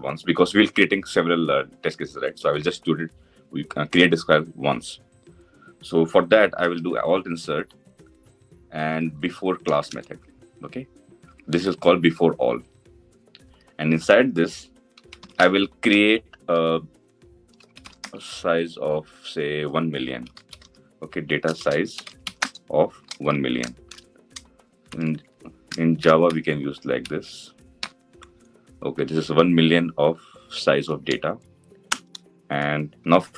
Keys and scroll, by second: 6.4 alt+Insert.